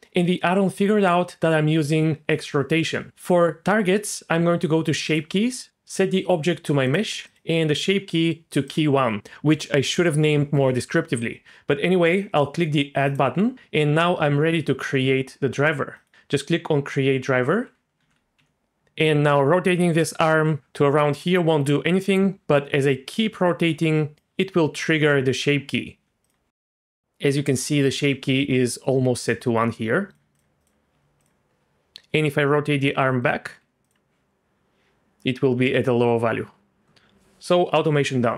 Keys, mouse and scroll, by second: 5.1 click, 5.7-7.0 drag, 7.2-8.7 drag, 13.1 click, 16.0 click, 18.0 alt+r, 25.9 Tab, 26.2 click, 30.1 click, 30.3 click, 30.9 Tab, 31.2 click, 31.9-33.1 drag, 33.2 click, 33.6 Tab, 33.8 click.